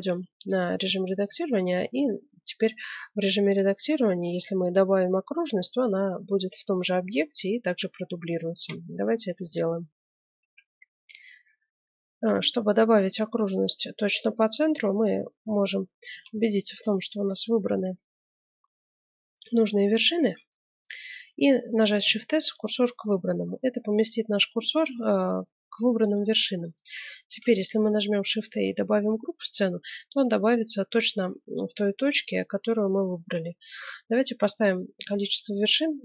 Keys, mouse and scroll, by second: 2.2 middle click, 10.4 F9, 16.1 a, 16.4 b, 21.9 shift+s, 27.2 shift+a.